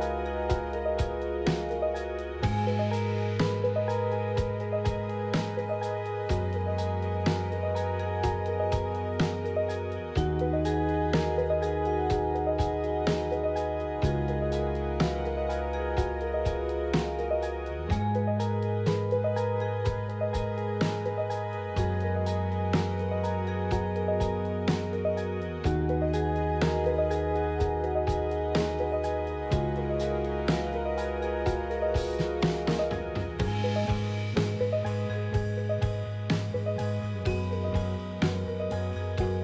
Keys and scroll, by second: 26.1 KP_1, 32.8 shift+z.